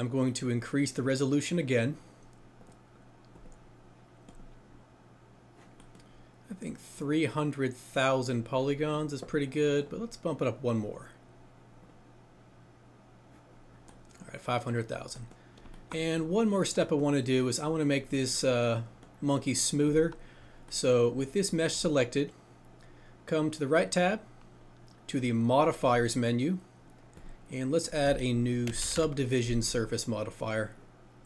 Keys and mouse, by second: 0.9 click, 2.6 click, 3.8-5.0 drag, 9.7 click, 17.7 click, 19.8 click.